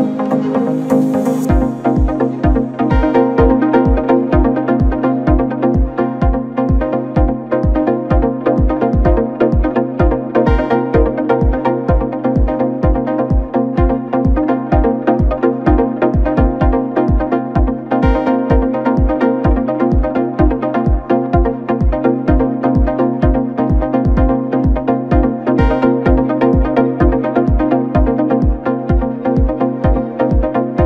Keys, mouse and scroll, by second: 0.1 scroll up 3, 0.4 scroll down 3, 0.6-1.6 middle drag, 1.6-2.8 drag, 2.8 scroll down 2, 2.9 middle click, 3.7-4.7 scroll up 5, 4.7-6.1 drag, 6.1 scroll down 5, 6.3 middle click, 7.2-9.7 scroll down 3, 9.7 click, 10.1 scroll up 2, 10.2-10.7 scroll down 4, 10.3 Tab, 10.7 middle click, 11.5 KP_7, 15.1 click, 15.5 scroll up 2, 15.7-16.3 scroll down 2, 16.3 KP_Divide, 17.2-18.0 scroll down 2, 18.0 ctrl+2, 19.8-21.2 scroll up 3, 21.2 click, 21.4 Tab, 22.2 click, 22.7 1, 23.7 click, 24.5 x, 24.7 Tab, 25.4 click, 25.6 scroll down 3, 25.8-26.1 middle drag, 26.1-26.6 scroll up 1, 26.6 KP_7, 29.0 Tab, 29.5 a, 30.3 b.